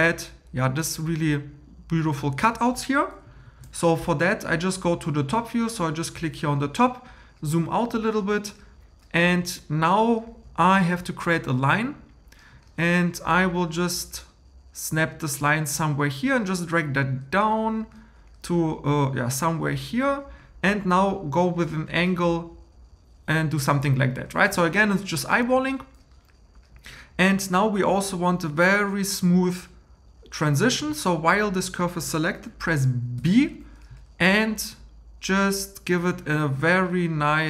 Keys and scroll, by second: 3.4 super+m, 33.2 b.